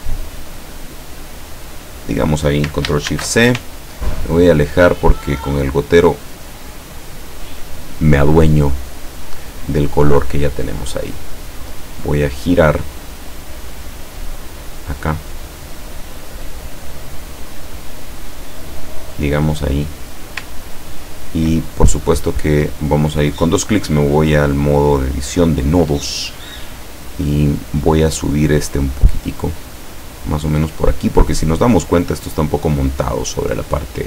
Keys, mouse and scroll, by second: 0.0-1.8 drag, 3.1 ctrl+shift+c, 3.9 ctrl+scroll down 2, 5.3 click, 6.1 click, 9.6 click, 11.6 click, 13.0-18.0 drag, 18.4-20.4 drag, 20.8-21.3 ctrl+scroll up 2, 22.0 click, 29.5-31.4 drag.